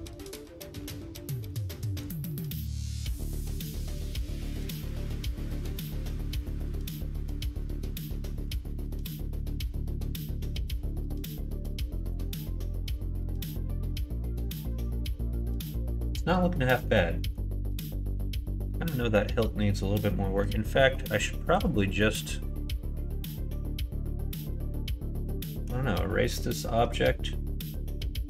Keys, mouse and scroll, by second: 0.2-1.5 middle drag, 1.8 middle click, 2.3 shift+middle click, 2.7 middle click, 3.2 middle click, 3.9 shift+middle click, 4.3 middle click, 4.8-5.9 middle drag, 6.6 click, 6.9-8.1 middle drag, 8.8 shift+middle click, 9.7-10.8 middle drag, 20.7 middle click, 21.5 click, 22.0 middle click.